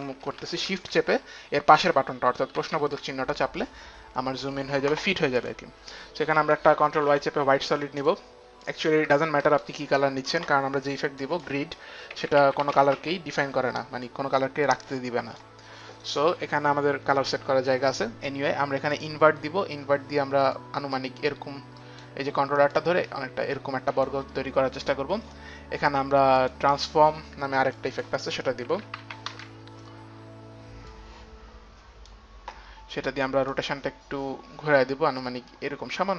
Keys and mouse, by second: 5.6 click, 7.0 click, 7.1 ctrl+y, 8.8 click, 9.2 ctrl+y, 9.2 Return, 9.2 click, 11.5 Return, 11.5 click, 12.4-14.6 typing, 12.6 click, 13.2 click, 13.5 click, 14.1 click, 14.9 click, 17.2 click, 17.2 d, 19.1 click, 20.8 click, 22.9 click, 23.3 click, 26.6 click, 28.0 click, 28.9-31.6 typing, 31.1 click, 33.1-33.8 typing, 33.7 click, 35.3 click.